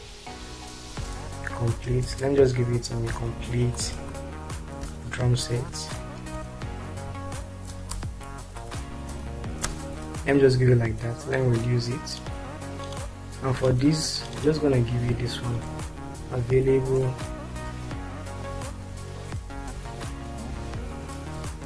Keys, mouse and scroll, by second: 0.0-1.8 typing, 2.9-4.0 typing, 5.3-8.7 typing, 9.6 ctrl+space, 14.5 click, 15.8 ctrl+a, 16.5 shift+c, 16.8 shift+a, 17.2 shift+BackSpace, 18.5-21.6 typing.